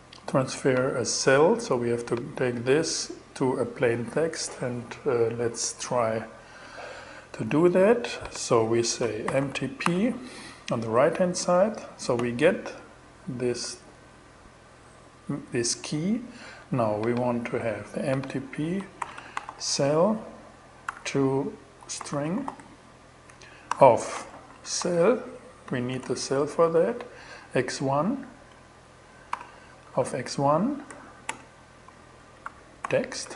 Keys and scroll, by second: 8.5-9.8 typing, 18.2-22.4 typing, 22.7 alt+g, 23.1 alt+5, 23.8 alt+shift+c, 23.8-24.7 typing, 26.1 BackSpace, 27.9 BackSpace, 28.4 alt+BackSpace, 28.8 alt+5, 29.3 alt+Right, 30.3-33.3 typing.